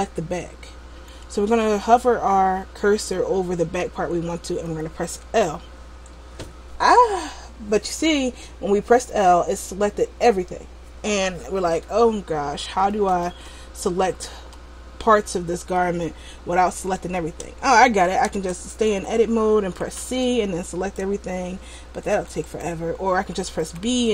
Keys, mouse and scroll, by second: 5.4 l, 13.2 l, 13.5 l, 14.6 l, 15.9 middle click, 17.6 Tab, 18.6 Tab, 19.1 a, 20.0 c, 22.7 right click, 23.8 b.